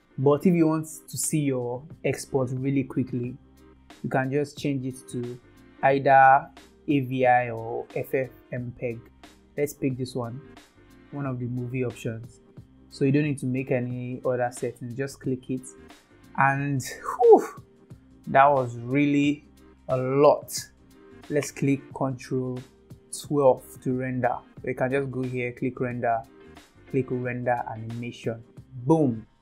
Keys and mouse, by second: 4.6-11.9 drag, 17.0 ctrl+s, 25.6-29.4 drag.